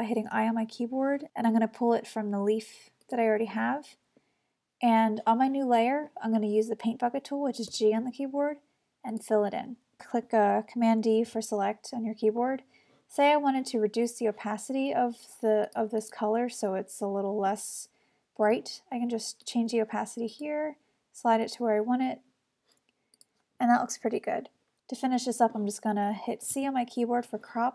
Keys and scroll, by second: 0.3 i, 7.7 g, 11.7 super+d, 26.6 c.